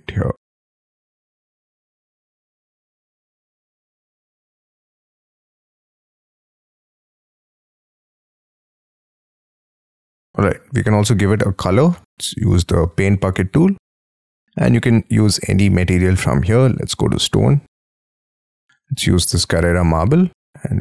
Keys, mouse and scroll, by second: 1.9 shift+click, 2.0 scroll down 4, 2.2 middle click, 2.4 space, 2.8 double click, 3.0 double click, 3.1 p, 3.3 scroll up 5, 5.0 scroll up 11, 5.7-6.1 scroll down 8, 6.1 middle click, 6.6 middle click, 7.7-8.6 scroll down 15, 8.1 Escape, 8.6 shift+middle click, 8.9-9.3 scroll up 12, 9.3 middle click, 11.9 b, 20.4 middle click.